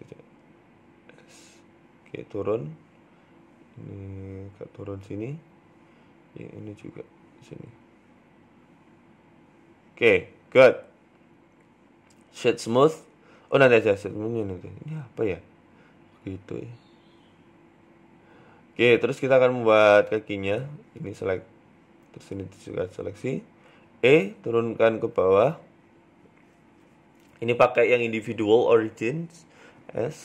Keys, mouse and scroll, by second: 0.0 alt+shift+right click, 0.6 s, 1.7 g, 2.9 alt+shift+right click, 3.2 s, 4.0 g, 4.9 shift+middle click, 5.5-5.9 scroll down 3, 5.9 click, 7.0 g, 7.7 s, 9.0 g, 9.6 Tab, 9.8 scroll down 3, 10.0 middle click, 11.6 w, 12.4 middle click, 12.6 scroll down 1, 12.8 shift+middle click, 13.1 middle click, 13.5-14.2 scroll down 3, 13.7 shift+middle click, 14.2-14.9 scroll up 2, 14.5 shift+middle click, 14.9 KP_1, 15.5 Tab, 15.8 scroll up 2, 16.0 middle click, 16.5 scroll down 1, 16.9 middle click, 19.1 right click, 20.1 click, 20.7 right click, 21.0 shift+middle click, 21.7 middle click, 22.1 shift+right click, 22.4 middle click, 23.4 KP_3, 23.9 ctrl+KP_7, 24.4 shift+middle click, 24.7 scroll down 2, 25.5 e, 26.0 s, 27.2 click, 28.2 s, 29.7 middle click.